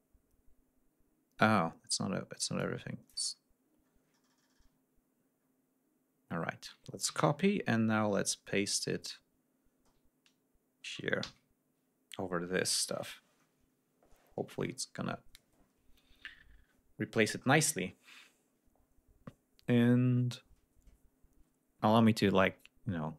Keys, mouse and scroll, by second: 0.0-0.5 ctrl+scroll up 2, 2.5 click, 3.2 ctrl+scroll down 2, 3.8 ctrl+scroll down 2, 4.7-5.1 ctrl+scroll up 2, 5.3 ctrl+scroll down 2, 5.9-6.5 ctrl+scroll down 4, 7.0 ctrl+c, 7.3-7.8 ctrl+scroll up 2, 8.7-9.7 ctrl+scroll up 4, 11.1 ctrl+v, 13.7 ctrl+scroll down 2.